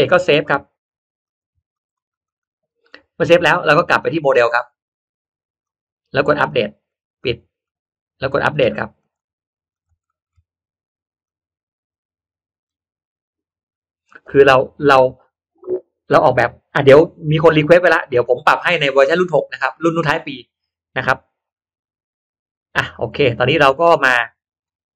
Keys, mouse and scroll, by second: 1.1 click, 1.7 click, 2.1 click, 4.2 click, 5.5 click, 6.8 click, 7.5 click, 8.9 click, 9.3-10.3 scroll down 2, 9.7 click, 10.0 middle click, 11.1 click, 12.5 click, 16.2 click, 17.5-18.1 scroll up 1, 18.1 middle click, 18.9 scroll up 1, 19.6 scroll up 1, 19.7 middle click, 21.6-22.0 scroll up 1.